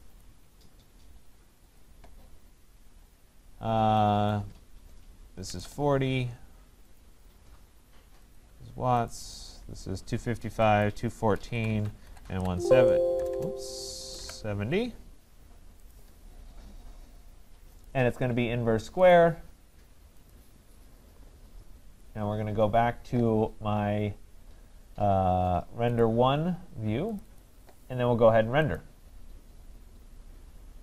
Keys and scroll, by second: 11.9 Tab, 13.1 BackSpace.